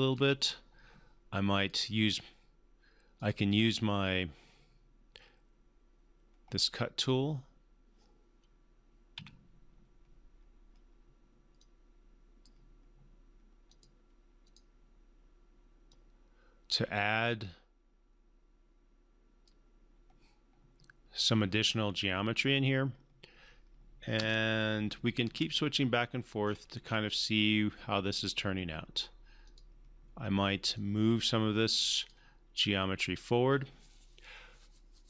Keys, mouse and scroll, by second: 6.9 click, 9.1 q, 11.6-12.5 drag, 24.2 space, 26.4 scroll up 1, 29.4-32.3 drag.